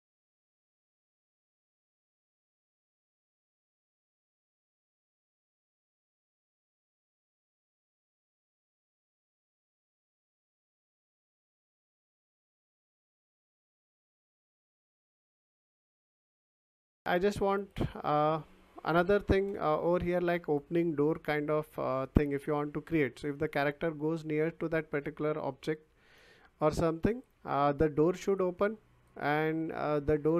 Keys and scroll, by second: 6.8 ctrl+z.